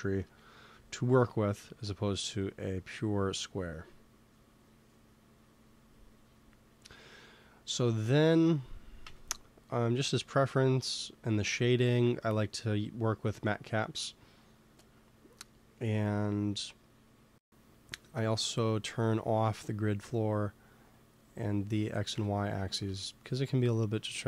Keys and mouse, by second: 0.1 KP_1, 8.9 n, 11.5-14.3 middle drag, 12.7-17.0 drag, 19.2-23.5 drag, 22.0 n, 22.7 ctrl+s.